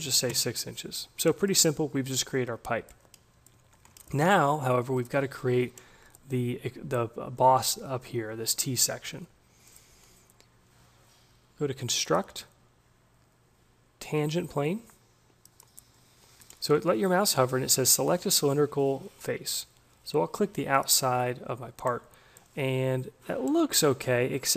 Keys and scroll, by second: 0.0 6, 0.3 Return.